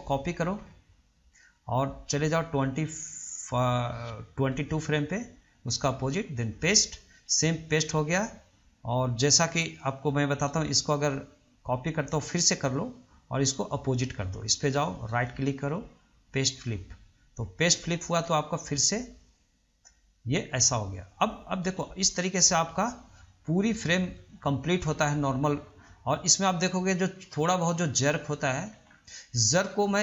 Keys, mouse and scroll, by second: 1.6-4.7 drag, 4.7 right click, 5.5-8.2 right drag, 8.2-10.5 drag, 10.7-13.0 right drag, 13.0-15.0 drag, 15.3 right click, 15.6-18.1 right drag, 18.1-18.5 scroll down 1, 18.5-21.5 middle drag, 21.5-26.4 drag, 26.4-27.5 middle drag, 27.5-28.2 scroll up 1, 28.2-29.1 middle drag, 29.1 scroll down 2, 29.4-29.8 middle drag, 29.8-30.0 scroll up 2.